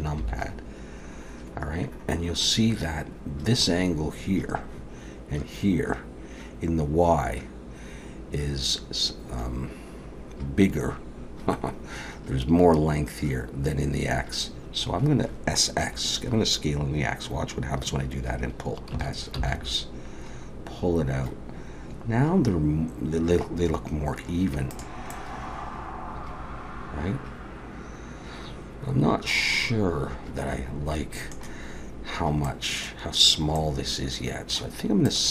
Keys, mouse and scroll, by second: 0.2 KP_7, 18.9 s, 25.1 middle click, 32.5 middle click, 33.5 middle click, 35.1 click.